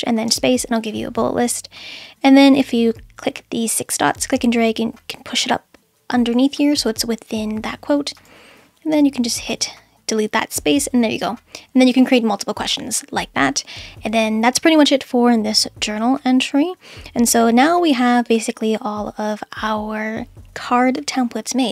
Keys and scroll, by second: 0.3 space, 8.9 BackSpace.